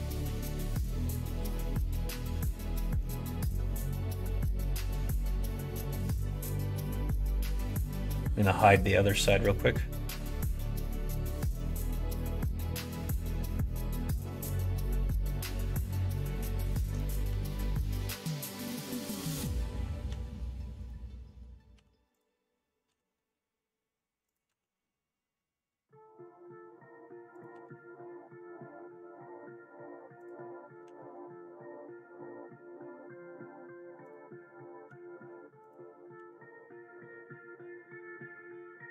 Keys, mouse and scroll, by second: 1.4 Tab, 2.3 middle click, 2.8 middle click, 3.3 middle click, 4.4 Tab, 4.9 click, 5.3 middle click, 5.8 middle click, 7.2 middle click, 8.0 click, 8.2 middle click, 9.2 click, 10.1 l, 10.7 h, 10.8 middle click, 11.7 click, 12.2 middle click, 12.7 3, 13.1 middle click, 13.7 g, 16.9 middle click, 17.2 s, 20.0 s, 21.7 2, 22.1 click, 22.8 e, 24.4 e, 30.8 r, 34.8 s, 36.1 g.